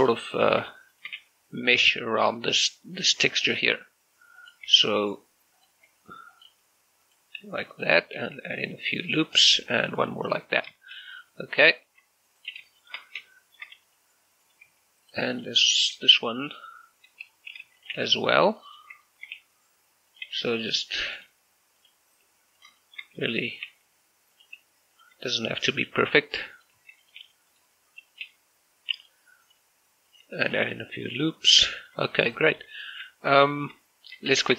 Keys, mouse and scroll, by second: 0.0 click, 0.4 right click, 1.0 shift+right click, 1.2-3.6 typing, 1.8 click, 2.4 click, 3.0 click, 3.5 click, 4.4 click, 4.8 e, 5.6 click, 5.9 s, 6.4 click, 6.6 g, 7.1 click, 7.4 r, 7.8 click, 8.4 ctrl+r, 8.7-9.1 scroll up 1, 9.1 click, 9.4 right click, 9.8 ctrl+r, 10.0 click, 10.2 right click, 11.2 right click, 11.6 shift+right click, 11.9 g, 12.4 click, 12.8 shift+middle click, 13.7 shift+middle click, 13.9 right click, 14.7 g, 15.1 click, 15.6 alt+right click, 16.0 shift+f, 16.6 right click, 17.6 shift+d, 17.8 click, 18.0 r, 18.8 click, 19.1 shift+middle click, 19.4-27.2 typing, 20.2 click, 21.2 click, 21.8 click, 22.6 click, 22.8 shift+middle click, 23.6 click, 24.4 click, 25.0 click, 25.8 click, 26.6 click, 27.1 click, 27.6 click, 28.2 right click, 28.3 g, 29.0 click, 29.5 right click, 29.6 g, 30.2 click, 30.4 ctrl+r, 30.7 scroll up 1, 31.1 click, 31.3 right click, 31.8 shift+middle click, 32.2 scroll down 1, 32.5 shift+middle click, 33.3 shift+middle click, 34.1 a, 34.4 a.